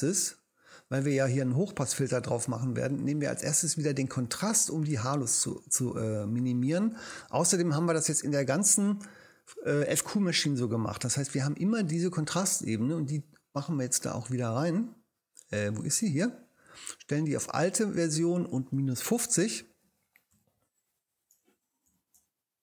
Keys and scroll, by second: 19.8-22.2 typing.